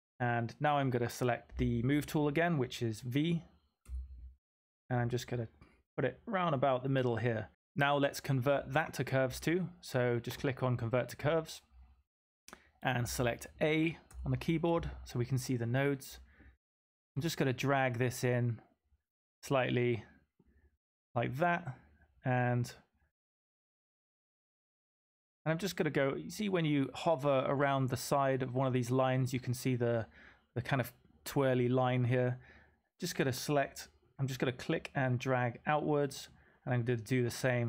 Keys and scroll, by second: 3.3-3.8 typing, 10.3-11.0 typing, 14.0 typing, 19.0-19.8 typing, 29.0-29.7 typing.